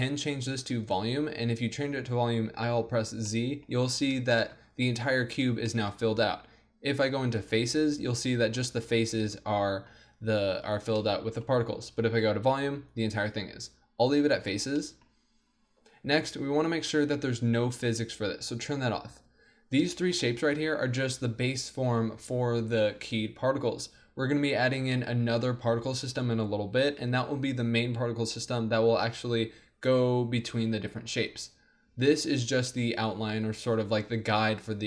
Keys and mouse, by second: 0.8-2.5 drag, 2.5 z, 7.4-9.1 drag, 10.6 middle click, 12.2-15.9 drag, 17.9-19.2 drag, 19.2 z, 19.6 click, 20.0-21.2 drag, 32.4-34.8 middle drag.